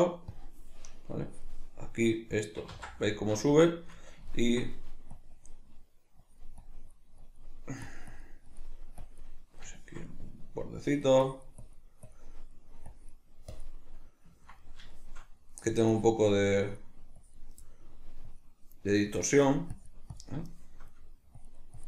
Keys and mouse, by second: 2.7 ctrl+z, 3.1-5.1 middle drag, 5.1-9.7 drag, 9.7-10.8 shift+middle drag, 10.8-12.3 drag, 12.3-12.9 middle drag, 12.9-14.0 drag, 14.0-15.9 middle drag, 15.9-17.6 drag, 17.6-18.2 middle drag, 18.2-20.5 drag, 20.5-21.4 shift+middle drag, 21.4-21.8 drag.